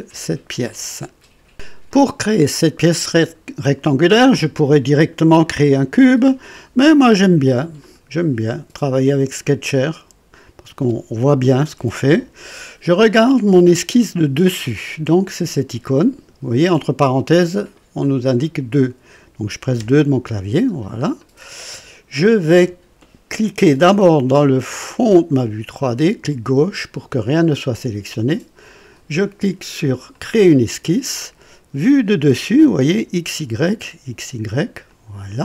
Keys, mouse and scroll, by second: 7.8 click, 9.9 click, 19.7 KP_2, 20.7-21.0 scroll up 1, 21.2 right click, 25.1 click, 30.1 click, 34.8 click.